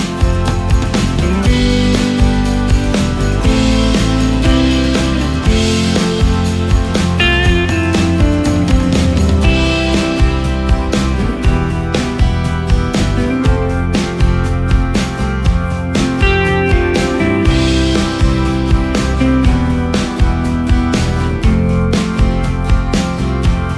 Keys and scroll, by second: 20.2 ctrl+space, 20.8 ctrl+space.